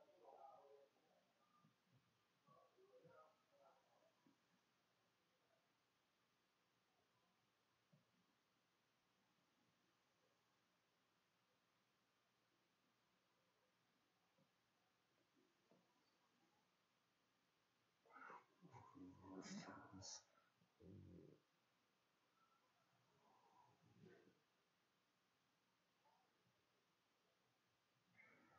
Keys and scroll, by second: 0.4-3.3 typing, 4.5 2, 13.9-17.1 typing.